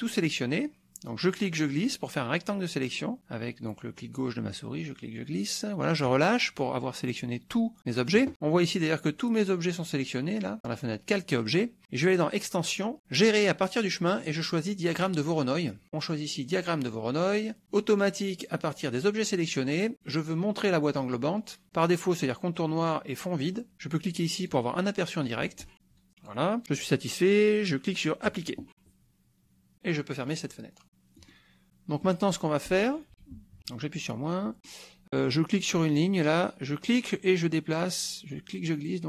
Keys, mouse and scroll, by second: 1.3-6.2 drag, 12.2 click, 15.0 click, 15.9 click, 16.9 click, 17.9 click, 19.9 click, 24.4-26.5 drag, 28.2 click, 30.2 click, 31.2 middle click, 32.0 middle click, 33.6 KP_Subtract, 34.4 middle click, 36.8-39.0 drag.